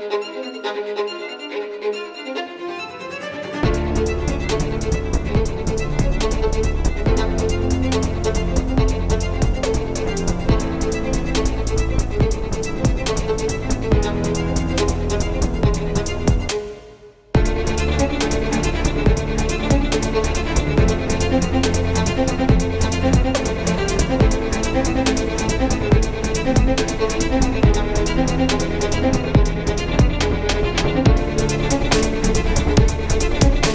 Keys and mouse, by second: 0.8 middle click, 2.5-4.0 right drag, 4.0 z, 5.3-6.0 middle drag, 8.9 middle click, 14.2 shift+a, 15.5 s, 17.2 KP_3, 17.6 z, 19.5-20.7 drag, 20.7 s, 22.6-24.3 drag, 24.3 s, 26.3-30.6 drag, 27.3 Tab, 31.6 Tab, 31.9 ctrl+a, 33.0 Tab.